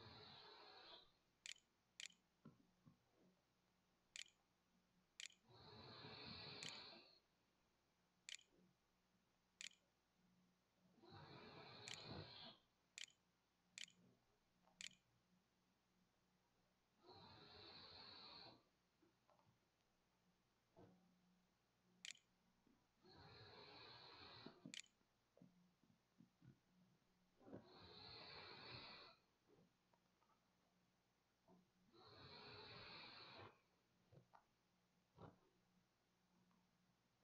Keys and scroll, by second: 0.0-1.8 typing, 3.2 d, 4.0 n, 5.0 t, 5.6 w, 6.9-15.7 typing, 21.0-26.8 typing.